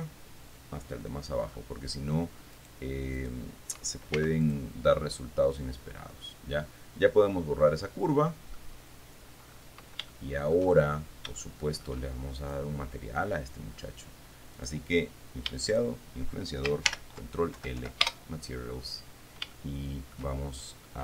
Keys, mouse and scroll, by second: 1.8-2.5 scroll up 1, 2.8 right click, 3.4 right click, 4.4 x, 4.7 click, 6.4-8.3 drag, 8.3 middle click, 9.0-9.7 scroll down 3, 9.7-10.1 scroll up 2, 10.4 shift+middle click, 11.7 shift+middle click, 12.7 shift+right click, 14.8 right click, 15.9 shift+right click, 17.1 ctrl+shift+l, 17.8 ctrl+l, 17.9 ctrl+Down, 18.3 ctrl+Return, 19.3-19.7 scroll down 2, 19.8 shift+click, 20.6-21.0 shift+scroll down 3.